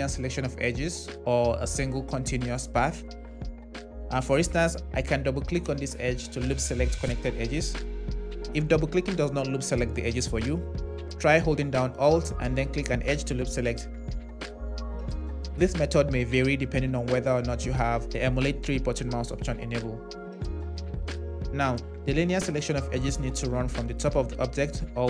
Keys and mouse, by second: 5.2 click, 12.7 click, 14.8-15.8 drag.